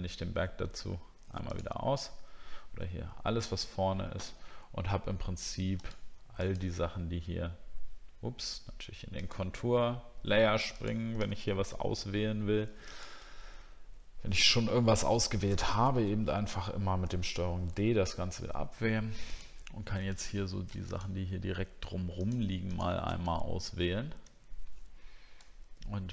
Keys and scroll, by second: 17.0 ctrl+d.